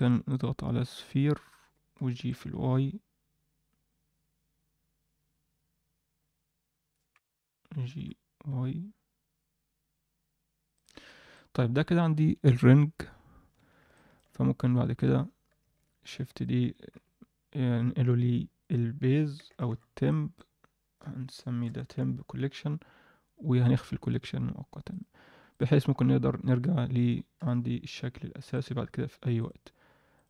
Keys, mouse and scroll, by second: 0.2-1.2 drag, 2.0 g, 10.9 Tab, 11.1 scroll down 1, 11.3-12.1 middle drag, 13.5 Tab, 13.9 alt+middle click, 14.3 Tab, 14.9 click, 16.0 shift+d, 16.9 m, 23.9-24.8 scroll down 1, 24.9 click, 25.4 click, 26.2 Tab, 26.6 Tab, 27.4 KP_1, 28.5 click, 29.3-30.2 drag.